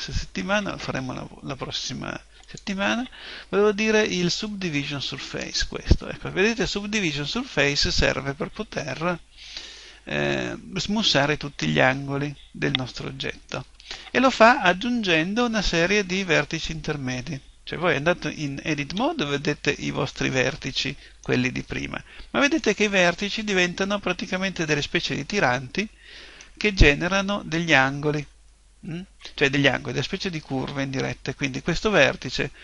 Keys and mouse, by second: 9.8-11.8 middle drag, 19.0 Tab, 20.1-23.7 middle drag, 24.2-26.0 middle drag, 26.9-30.2 middle drag, 31.1-32.6 middle drag.